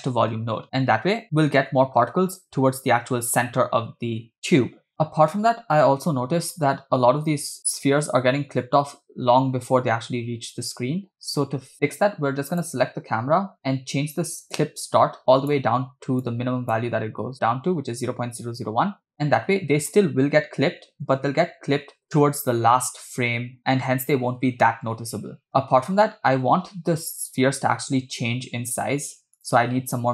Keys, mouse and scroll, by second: 0.8 space, 4.4 space, 4.9 space, 6.1 Left, 6.2 Left, 6.8 Right, 12.5 click, 14.5-15.6 drag, 16.2 click, 19.2 space, 19.4 space, 20.7 Right, 20.8 Right, 21.1 Right, 21.4 Right, 21.5 Right, 21.6 Right, 21.7-22.2 Right, 22.7-23.6 Right, 23.9 Right, 24.1 Right, 24.2 Right, 24.4 Right, 24.5 Right, 25.1-26.3 Left, 26.5 Left, 26.5-27.8 Right, 29.4 click.